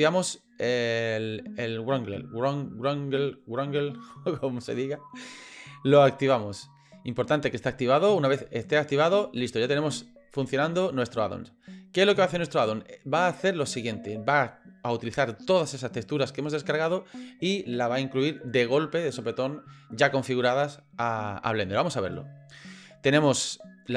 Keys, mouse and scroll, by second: 22.0 click.